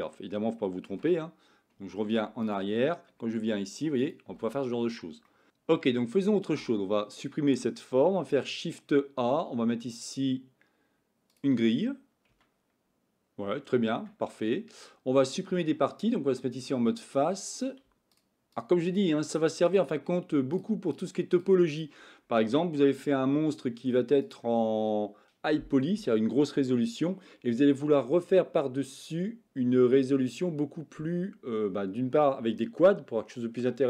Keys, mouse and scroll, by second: 0.9 ctrl+z, 2.0 ctrl+z, 2.4 click, 3.3 f, 4.3 f, 5.2-7.8 middle drag, 7.8 x, 8.3 shift+a, 12.3 Tab, 13.4 Tab, 13.9 Tab, 14.4-15.6 middle drag, 16.6 click, 17.5 click, 18.5 shift+click, 18.8 shift+click, 19.6 shift+click, 20.5 shift+click, 20.8 shift+click, 21.7 shift+click, 22.8 x.